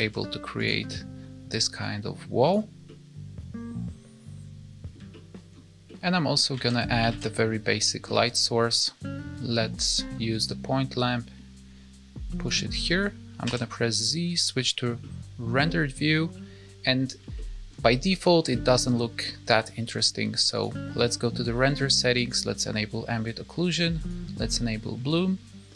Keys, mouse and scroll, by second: 0.8 middle click, 1.7 click, 2.8 middle click, 5.1 shift+middle click, 5.8 middle click, 6.5 alt+a, 7.0 shift+a, 11.1 click, 13.4 z, 15.7-16.4 scroll up 2, 16.4 middle click, 17.3 shift+middle click, 18.0 middle click, 18.5 shift+middle click, 18.9 middle click, 20.5 click, 22.2 click, 24.0 click.